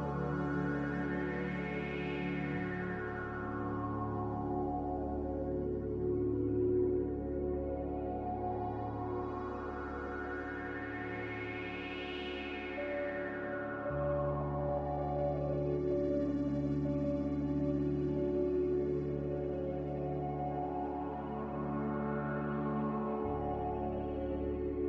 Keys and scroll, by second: 0.7 Delete, 6.6 z, 8.0 g, 14.9 z, 16.8 a, 17.6 ctrl+c, 18.2 ctrl+z, 18.5 ctrl+z, 20.3 ctrl+v.